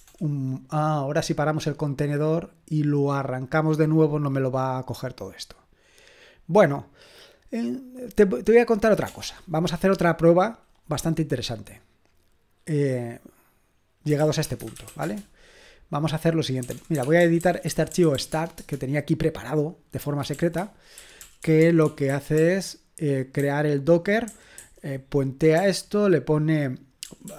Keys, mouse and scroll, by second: 4.2 BackSpace, 4.8-5.8 scroll down 1, 5.8-7.1 scroll down 1, 7.1-8.0 scroll down 1, 8.0-8.5 scroll down 1, 8.5-14.1 drag, 9.0 BackSpace, 13.9-18.4 typing, 18.5 Return, 20.3-25.5 typing, 27.0-27.3 typing.